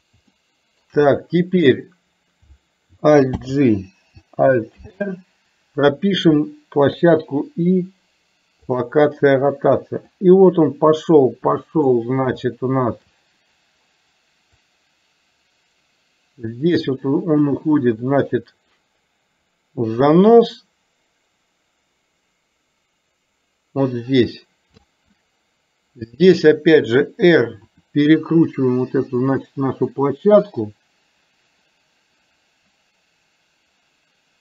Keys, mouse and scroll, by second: 0.5-1.0 shift+middle drag, 3.5 alt+g, 7.0 i, 10.3-12.0 drag, 12.6 shift+middle click, 14.7-24.8 drag, 27.7 r.